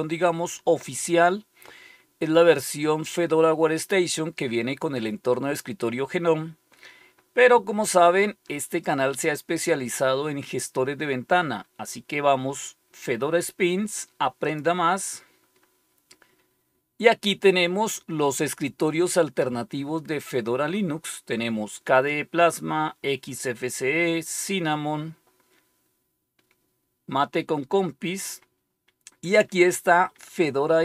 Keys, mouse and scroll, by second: 6.4-6.8 scroll down 1, 7.1 scroll down 1, 8.6-9.3 scroll down 1, 10.0-10.5 scroll down 1, 14.3 click, 20.7-21.3 scroll down 2, 21.8-22.5 scroll down 2, 22.5-23.1 scroll down 1, 25.0-25.6 scroll down 1, 27.7-28.2 scroll down 1.